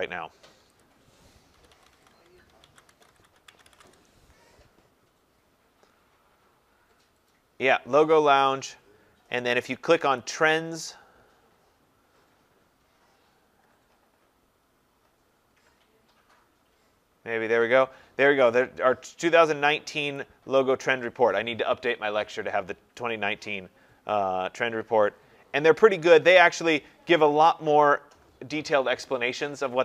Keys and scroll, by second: 3.8 Return.